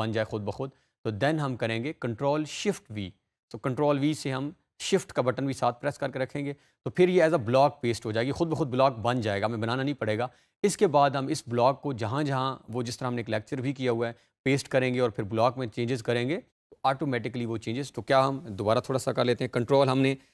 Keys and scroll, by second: 1.7 ctrl+shift+v, 19.8 ctrl+c.